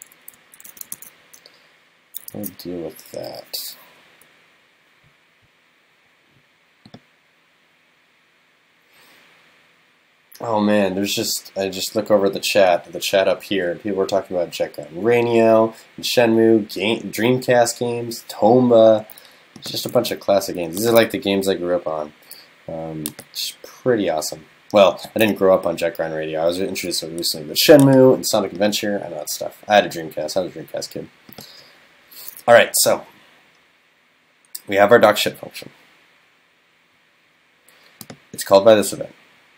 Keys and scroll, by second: 0.4 super+Right, 1.0 super+s, 2.3 super+s, 20.0 super+s.